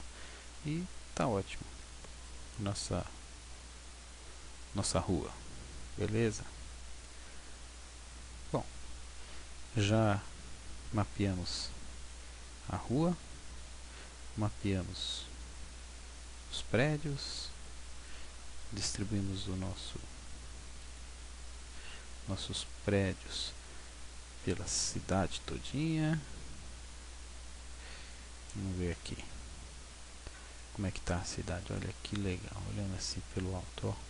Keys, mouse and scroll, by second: 9.2-10.8 scroll down 1, 10.8 scroll down 2, 11.5 middle click, 18.1 click, 21.9 shift+click, 22.1-23.6 scroll up 10, 23.8 middle click, 28.9 KP_0, 30.0-30.7 scroll up 6, 31.8 middle click.